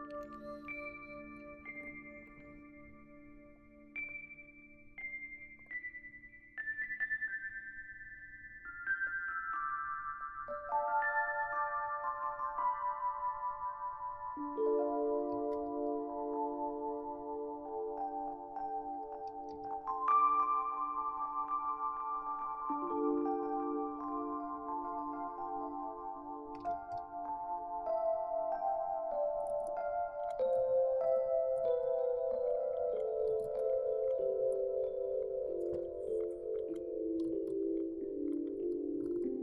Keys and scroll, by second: 0.0-0.4 typing, 1.7 ctrl++, 1.8 ctrl++, 2.9 Print, 15.5 ctrl+c, 19.5 ctrl+v, 26.3-27.4 typing, 29.6 ctrl+z, 30.5 shift+Down, 30.7 shift+Down, 30.7 shift+Down, 31.2 Down, 31.4 Down, 33.0-33.9 typing, 34.4 shift+Down, 36.9-38.0 typing, 38.7-39.1 Down.